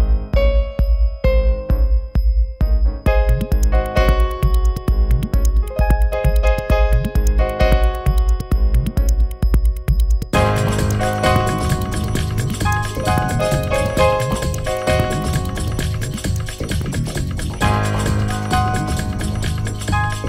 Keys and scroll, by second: 13.7 space, 16.2 space, 19.7 q.